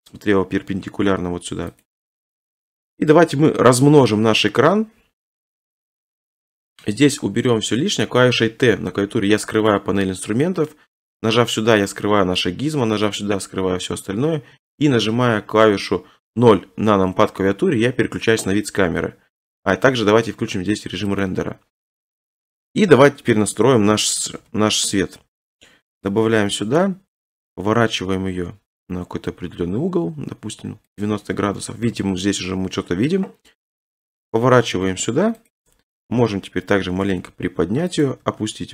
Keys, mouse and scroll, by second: 1.2 g, 1.8 click, 3.9 right click, 6.6 click, 7.1 t, 10.3-11.9 scroll, 11.9 click, 11.9-12.3 scroll, 13.2 click, 16.3 o, 20.2-21.2 scroll, 21.2 click, 22.7 3, 24.4 7, 26.1 middle click, 26.7 KP_3, 31.0 ctrl+click, 31.5 7, 33.7 r, 35.5 click, 36.0-37.1 typing, 38.1 click, 38.3 r.